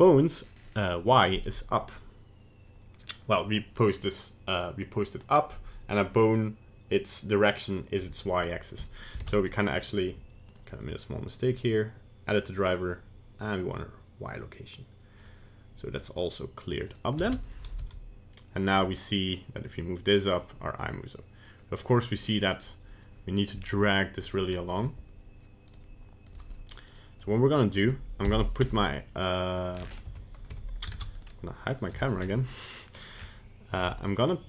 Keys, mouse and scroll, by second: 3.1 click, 8.8 right click, 9.2 ctrl+Tab, 9.5 right click, 10.5 click, 11.3 right click, 16.9 right click, 17.3 ctrl+Tab, 17.5 right click, 17.9 g, 23.6 scroll down 3, 24.5 scroll up 2, 25.7 right click, 26.3 right click, 26.9 right click, 27.6 middle click, 28.6 KP_1, 29.8 scroll down 7, 30.2 Tab, 30.6 Tab, 31.2 right click, 32.0 h, 32.2 scroll up 5, 33.0 right click, 33.2-33.9 scroll up 2, 33.9 Tab.